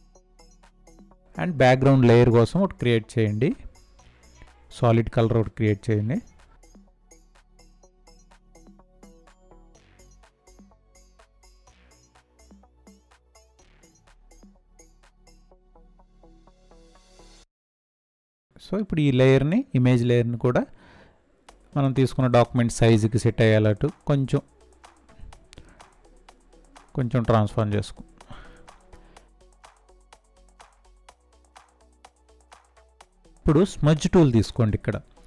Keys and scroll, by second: 20.5 ctrl+t.